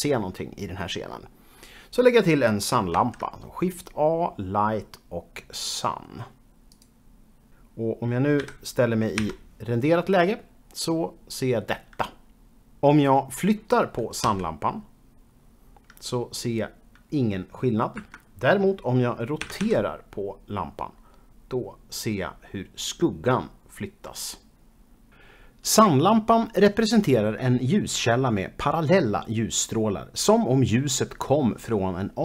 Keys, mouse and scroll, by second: 3.0 shift+a, 6.7 click, 8.4-9.2 typing, 14.3 g, 18.0 Escape, 19.4 r, 19.6 r.